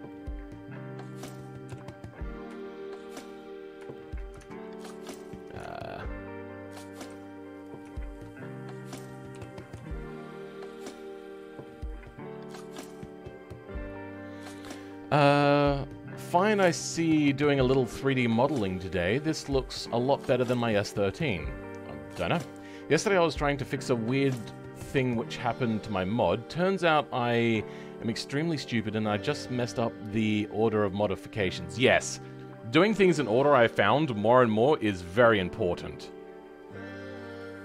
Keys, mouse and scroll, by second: 1.6 KP_7, 2.0-2.5 scroll down 5, 2.5-3.6 shift+middle drag, 3.6 scroll down 2, 3.8 shift+middle click, 5.6-7.0 shift+middle drag, 7.0 r, 7.9 shift+middle click, 8.3-9.4 scroll up 4, 9.4 g, 11.8 middle click, 12.7-13.1 scroll up 6, 32.7-33.1 scroll down 4, 33.2-34.3 middle drag, 34.4-34.8 scroll up 5, 34.8-37.4 middle drag, 37.4 click.